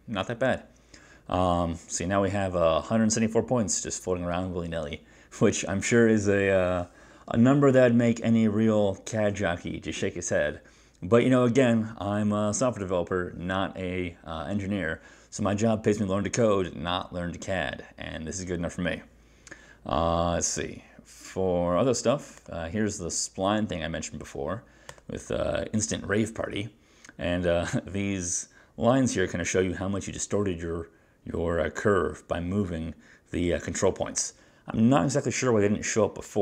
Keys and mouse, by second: 25.0 click.